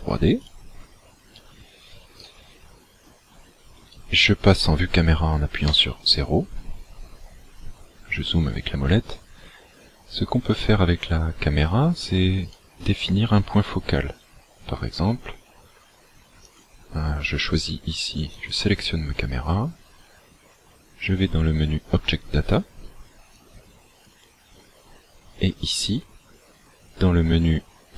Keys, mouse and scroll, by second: 0.5 click, 2.3 right click, 5.7 KP_0, 7.0-7.6 scroll up 4, 8.0-8.3 scroll up 1, 12.6 right click, 16.4 click, 18.4 click, 23.3 click.